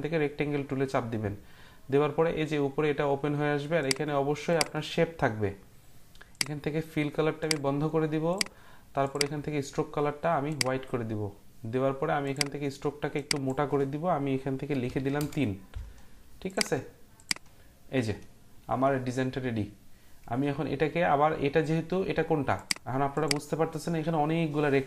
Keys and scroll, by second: 14.8 3, 15.2 Return.